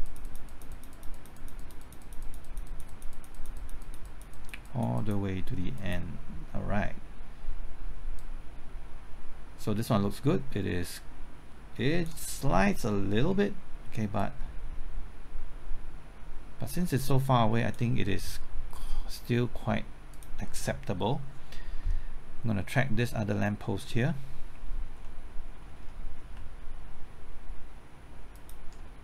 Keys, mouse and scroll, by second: 12.7-13.9 middle drag, 14.2-17.9 drag, 25.0 middle click, 26.3 typing, 28.3 ctrl+click.